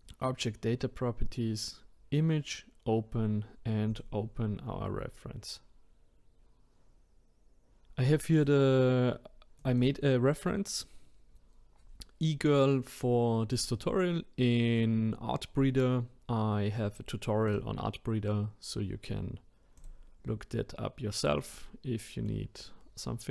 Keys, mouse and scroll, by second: 3.9-7.0 drag, 21.4-22.8 middle drag, 22.8-23.3 scroll up 4.